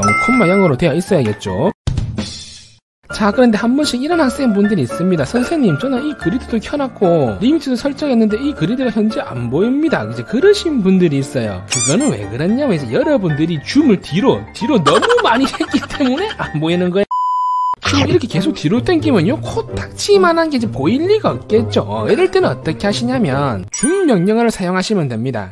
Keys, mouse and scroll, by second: 14.4-15.7 scroll down 5, 15.9 middle click, 19.4-21.0 scroll up 5, 21.0 scroll down 1, 21.7 scroll down 1, 22.1 click, 22.2 click, 22.8 click.